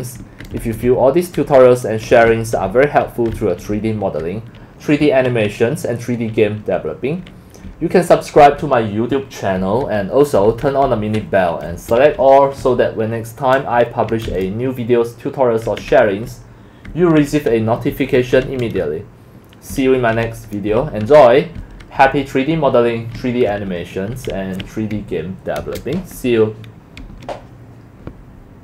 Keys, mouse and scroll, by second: 0.0-5.7 typing, 7.4-14.5 typing, 16.0-24.3 typing, 16.6 click, 26.7 right click, 27.0 Escape, 27.7 click, 28.1 scroll up 1.